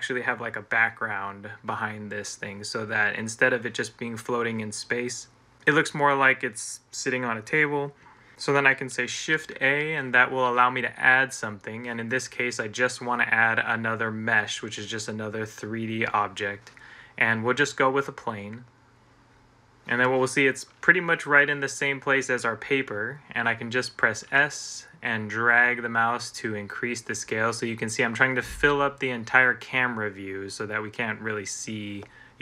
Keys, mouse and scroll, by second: 9.2 a, 24.0 s.